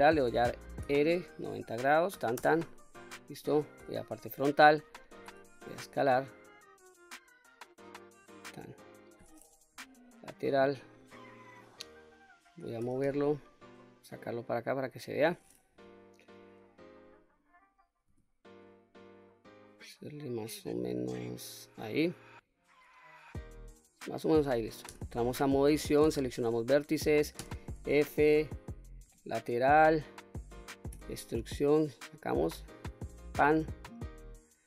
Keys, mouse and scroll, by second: 0.7 r, 1.8 KP_9, 2.0 KP_0, 2.3 Return, 3.7 KP_1, 5.1 s, 8.1 click, 9.6 KP_3, 12.7 g, 12.9 y, 14.5 click, 15.6 KP_1, 18.0 s, 21.5 click, 24.8 Tab, 25.9 1, 27.3 f, 28.9 KP_3, 30.8 e, 33.0 click, 33.9-34.6 middle drag.